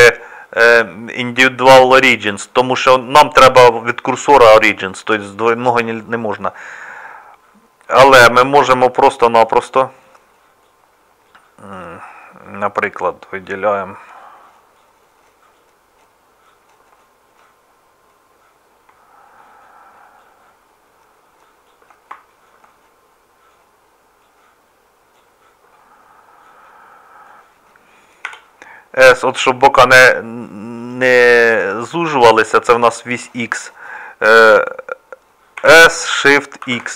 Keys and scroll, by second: 28.3 s, 35.6 s.